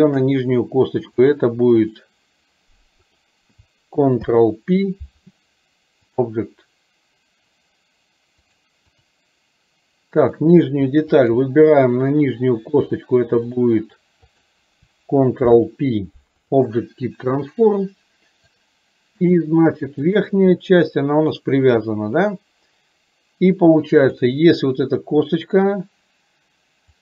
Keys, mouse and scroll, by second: 0.1 shift+click, 1.3 click, 3.1 click, 4.6 ctrl+p, 8.5 click, 10.3 click, 11.3 shift+click, 13.0 click, 18.6 click, 24.1 click.